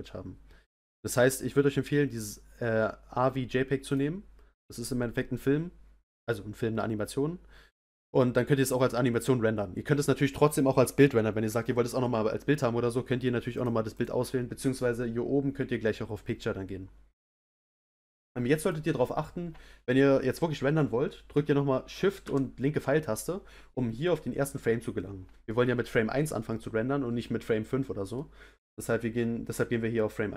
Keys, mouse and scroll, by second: 14.5 click, 18.6 click, 22.2 shift+Left.